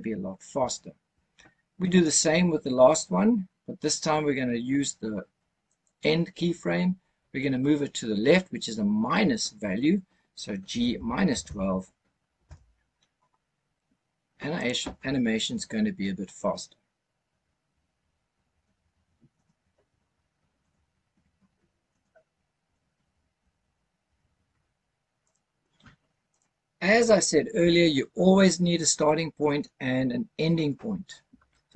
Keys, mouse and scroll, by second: 5.6 click, 10.6 g, 10.9 KP_Subtract, 11.2 KP_1, 11.4 KP_2, 12.3 KP_Enter, 14.5 click, 25.1 click, 26.2 click.